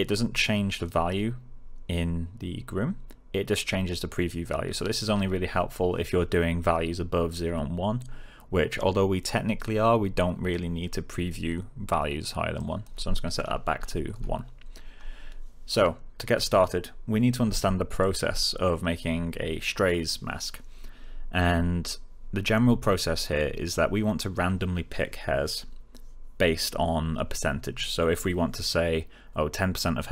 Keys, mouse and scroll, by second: 0.7 click, 12.5 click, 13.7 1, 14.1 Return, 15.7-16.6 click.